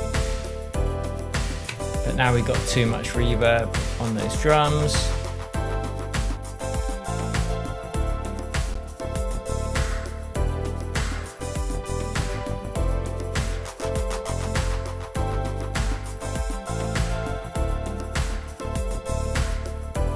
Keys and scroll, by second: 1.6 Tab.